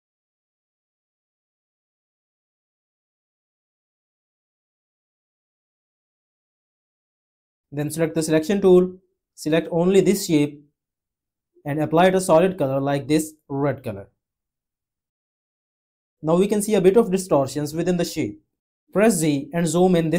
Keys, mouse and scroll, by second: 19.3 z.